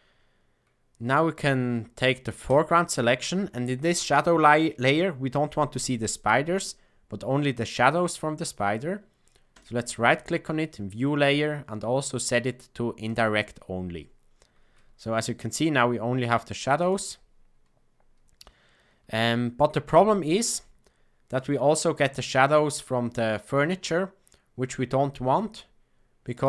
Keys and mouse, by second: 2.4 click, 9.4-13.1 right drag, 15.1-15.5 shift+middle drag, 16.7 click, 19.1 shift+middle click, 26.3 click.